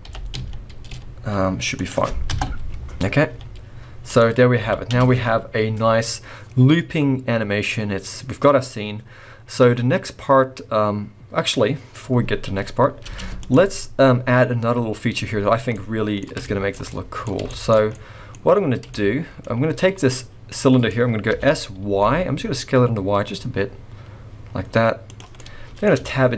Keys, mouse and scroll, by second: 0.0 g, 2.3 KP_0, 3.3 z, 4.4 scroll up 4, 4.6 alt+a, 4.9 space, 12.6-12.9 scroll up 2, 13.0 space, 13.4 click, 13.7-14.3 scroll down 4, 14.2-14.9 scroll up 4, 14.9-15.7 scroll down 1, 15.7 middle click, 16.4 shift+middle click, 16.9 middle click, 17.5 shift+middle click, 17.9 middle click, 18.3-18.9 scroll up 3, 18.9 shift+middle click, 20.1 middle click, 21.3 s, 25.3 middle click, 26.0 Tab, 26.2 scroll down 4.